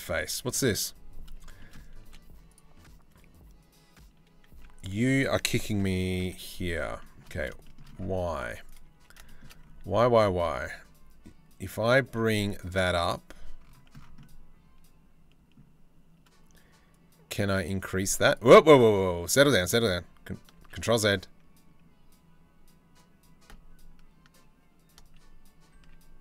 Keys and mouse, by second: 0.0 Tab, 1.0 shift+middle click, 1.3 click, 1.7 3, 2.1 click, 4.1 z, 5.4 KP_3, 5.8 KP_1, 6.6 shift+middle click, 7.2 shift+middle click, 7.9 1, 18.2 ctrl+z, 20.2 ctrl+z, 24.6 ctrl+z, 25.3 ctrl+z.